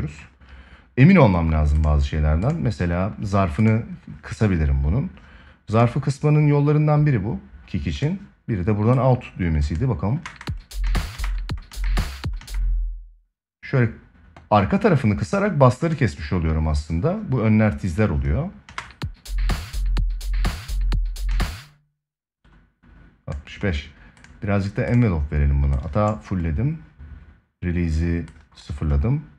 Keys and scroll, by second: 9.9 space, 18.4 space, 21.0 space.